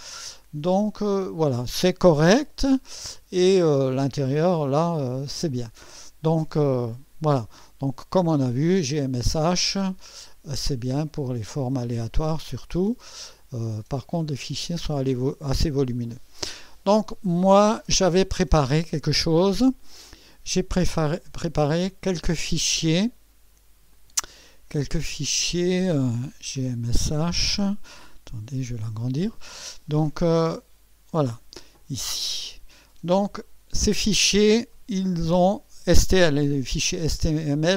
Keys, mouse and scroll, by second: 2.8-4.5 drag, 8.7 click, 9.9 click, 12.8 click, 14.0-16.4 drag, 21.3 click, 23.9 click, 25.4 click, 26.6 0, 28.4 scroll up 2, 31.6 click, 37.2 click.